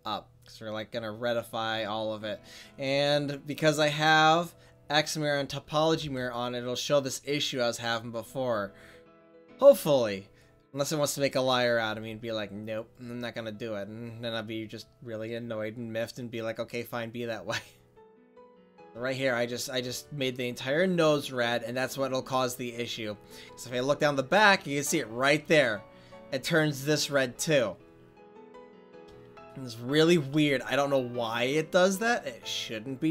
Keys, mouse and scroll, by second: 1.3-6.0 drag, 6.0 ctrl+s, 8.1-8.7 right drag, 8.7-9.2 middle drag, 9.4 middle click, 9.6 click, 9.9 middle click, 11.9 f, 12.8-15.1 drag, 15.8 middle click, 21.3-22.3 drag, 23.0 middle drag, 23.2 middle click, 23.4 middle click, 28.9-30.0 middle drag.